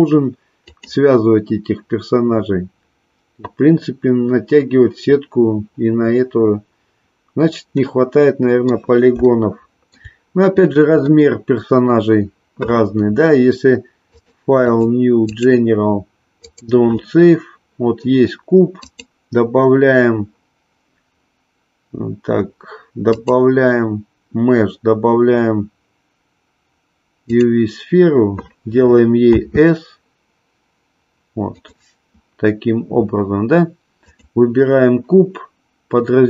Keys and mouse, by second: 0.7-5.0 drag, 7.8-8.8 middle drag, 9.2-10.1 shift+middle drag, 11.1-12.0 middle drag, 14.1-16.7 drag, 18.9-27.5 drag, 34.1 click.